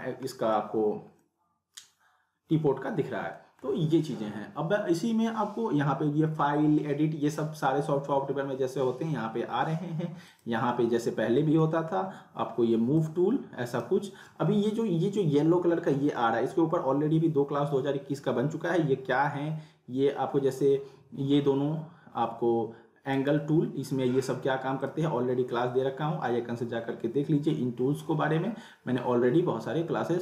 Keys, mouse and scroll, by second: 0.3 middle click, 0.6 scroll up 1, 1.2-1.8 middle click, 1.7 scroll down 1, 3.3 middle click, 10.3 click, 11.6 middle click, 12.2 scroll down 1, 12.9-13.9 drag, 15.9 ctrl+z, 23.1 right click, 24.8 click.